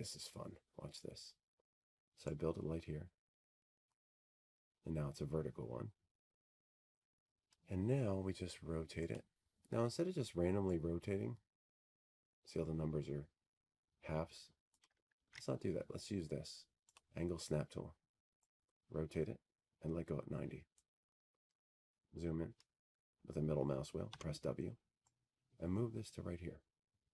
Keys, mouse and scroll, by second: 2.3-6.4 drag, 9.4-11.7 drag, 14.7 click, 20.2 click, 20.8 ctrl+z, 22.6 click, 26.3 click.